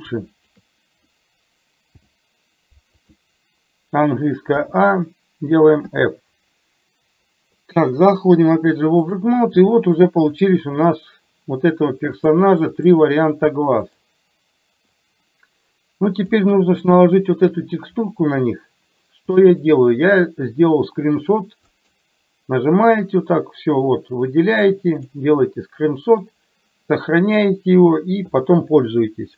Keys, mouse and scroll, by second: 0.4 shift+click, 1.9 m, 4.7 a, 5.9 f, 8.6 click, 10.4 click, 12.3-14.2 drag, 14.9-16.4 drag, 16.9 shift+middle click, 19.4 shift+middle click, 21.7-29.3 drag.